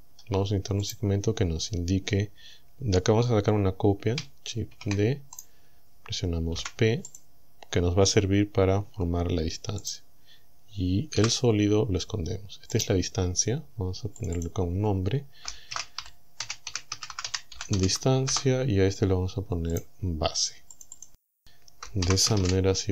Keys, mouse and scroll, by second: 0.0-0.3 scroll up 1, 0.9 right click, 4.8 shift+d, 5.4 right click, 6.6 p, 7.1 click, 8.9 Tab, 9.9 right click, 11.2 h, 11.9 scroll down 1, 12.8 right click, 14.2 click, 15.5-18.3 typing, 18.3 shift+Return, 19.8 right click, 20.8 click, 22.1 shift+b, 22.4 shift+s.